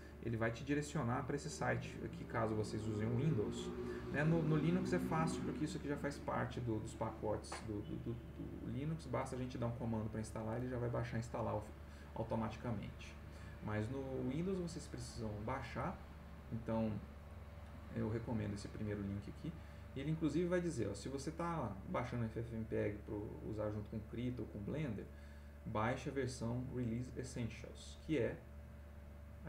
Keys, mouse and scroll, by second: 16.4 click, 23.5 click, 24.2 click, 26.3 click, 27.6 click, 29.2-29.4 drag.